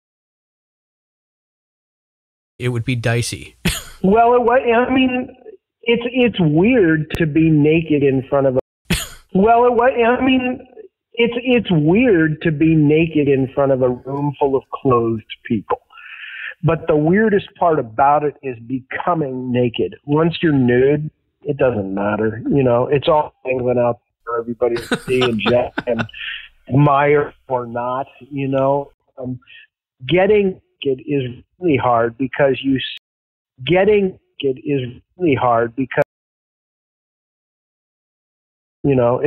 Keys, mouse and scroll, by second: 0.2-1.9 drag, 2.4 click, 2.5 space, 5.1 click, 6.2 click, 7.6 click, 8.0 click, 8.5 space, 8.7 click, 8.7 space, 10.2 ctrl+s, 11.6-13.0 drag, 13.3 click, 14.5 click, 15.3-17.2 drag, 17.4 click, 18.7 ctrl+s, 22.2-24.0 drag, 24.4 click, 25.7 click, 26.1 click, 27.3-28.4 drag, 28.8 Delete, 30.2 click, 31.0 click, 32.9 space, 33.3 click, 33.3 space, 35.9 space, 36.1-37.2 drag, 37.6 Delete, 38.7 click, 38.7 space.